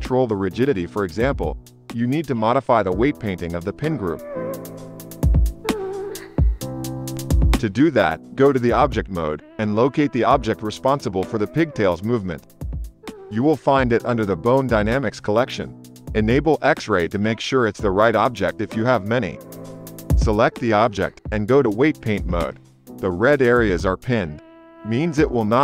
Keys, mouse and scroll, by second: 0.6 space, 2.2 space, 2.6 space, 3.6 click, 5.4 space, 5.9 shift+Left, 9.6 click, 10.9 ctrl+Tab, 16.6 click, 17.2-25.6 drag, 21.8 ctrl+Tab.